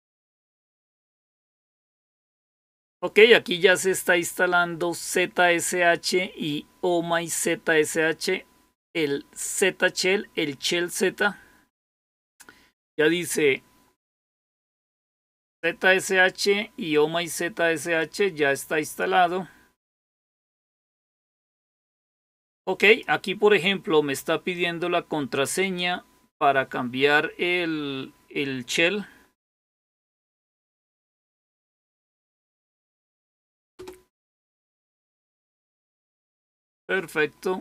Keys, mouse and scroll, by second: 17.9-18.9 drag, 21.1 click, 22.7 click, 25.5 click, 30.6-33.3 typing, 33.6 Return.